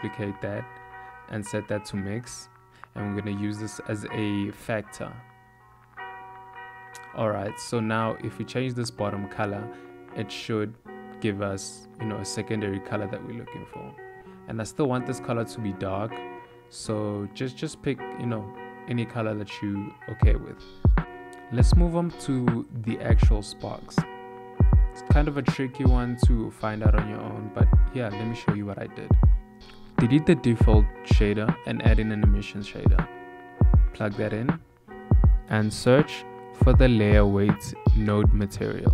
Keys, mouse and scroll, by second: 2.5 click, 7.0 ctrl+shift+click, 7.8 click.